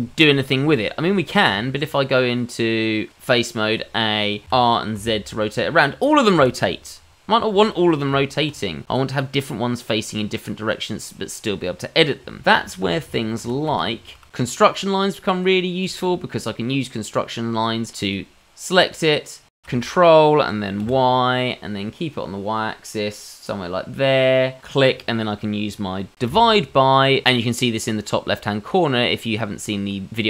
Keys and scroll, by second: 1.5 Tab, 3.6 a, 4.4 s, 4.4 r, 8.1 Tab, 12.4 ctrl+z, 12.6 ctrl+z, 12.8 ctrl+z, 13.0 ctrl+z, 13.4 ctrl+z, 13.7 ctrl+z.